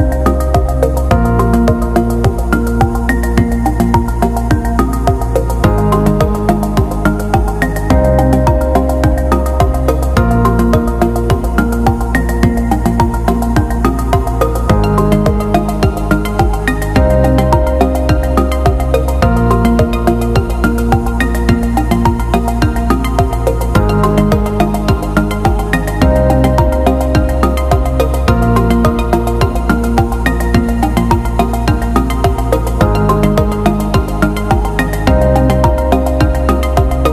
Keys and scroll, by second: 27.3 i.